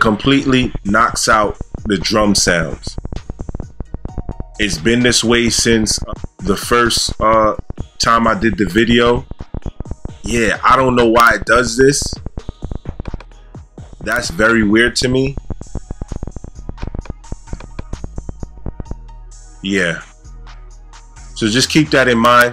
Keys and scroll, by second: 18.8 space.